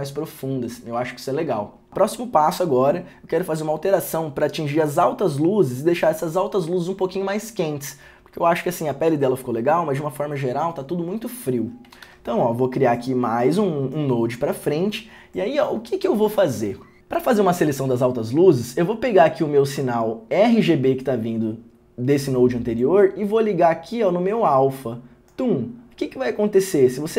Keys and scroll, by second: 12.2 alt+s.